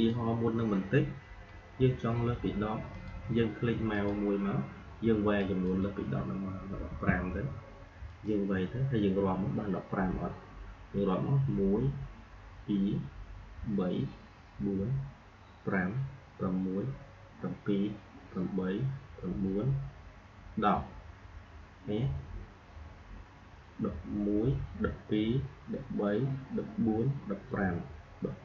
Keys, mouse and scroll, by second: 2.8 click, 8.1 click.